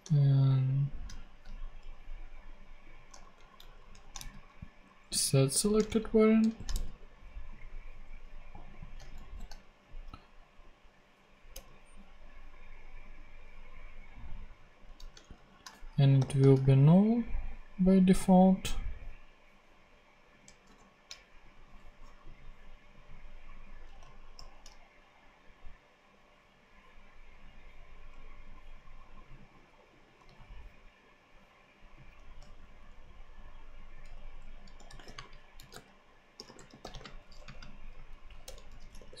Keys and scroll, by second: 0.2 alt+shift+Right, 3.1 shift+super+Right, 3.8 alt+shift+super+Left, 4.1 alt+shift+super+c, 5.6 Left, 5.8 shift+super+Right, 6.3 shift+super+Left, 6.7 shift+super+v, 9.1 shift+super+v, 10.4 shift+super+Right, 11.5 Return, 14.9 Left, 15.2 shift+Right, 15.7-16.8 typing, 20.6 shift+/, 24.3 shift+super+p, 30.2 super+c, 33.9-37.4 typing, 37.9 super+space, 38.1 super+Right, 38.4 super+Return, 38.4-39.2 typing.